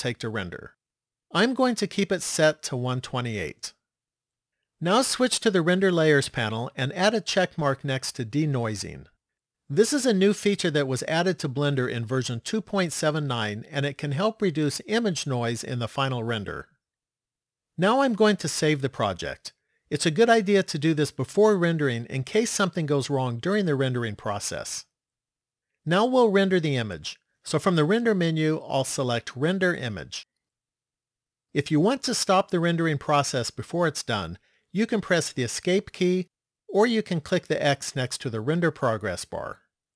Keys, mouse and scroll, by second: 6.0 click, 8.1 click, 18.9 click, 27.6 click.